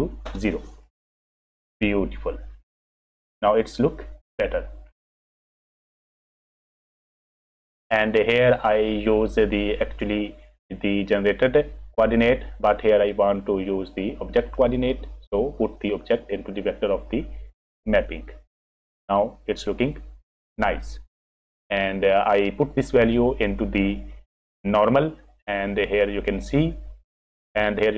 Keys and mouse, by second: 5.2 middle click, 7.2 F6, 8.9 click, 14.5-17.8 drag, 21.6 click, 23.6 click, 23.9 click, 25.4 click, 25.6-26.6 drag, 26.7 click.